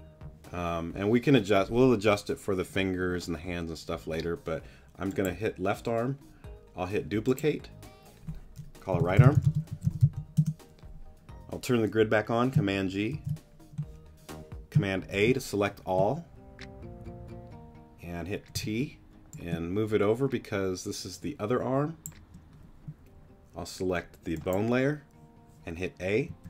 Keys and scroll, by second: 8.9-10.0 typing, 10.4 Return, 13.1 super+g, 15.1 super+a, 18.5 t, 19.5 shift+t, 26.3 a.